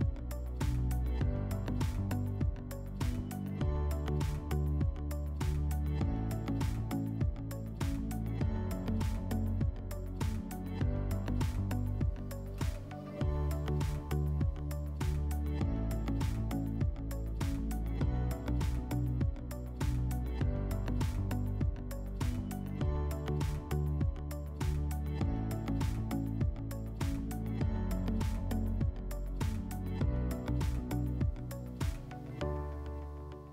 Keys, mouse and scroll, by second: 2.9-33.5 drag.